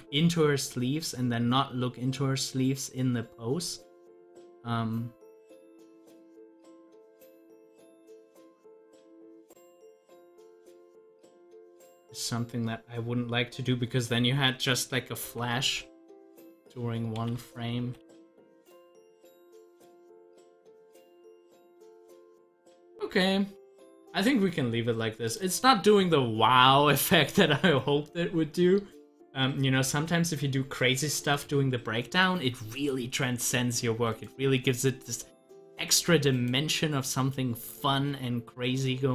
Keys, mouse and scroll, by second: 0.5-6.5 drag, 6.5 ctrl+z, 9.7 z, 10.5-13.5 drag, 13.7 double click, 25.2 click, 26.3 scroll up 1, 31.3 click, 35.2 Delete, 35.6 click, 35.9 Delete, 36.3-39.1 drag.